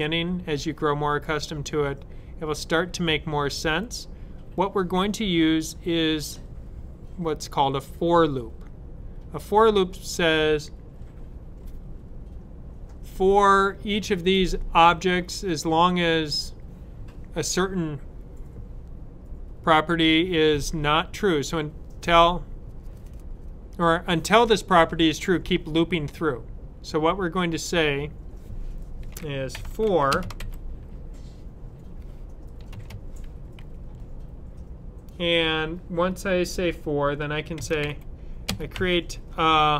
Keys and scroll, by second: 29.1-30.2 typing, 35.4 typing, 37.2-38.6 typing.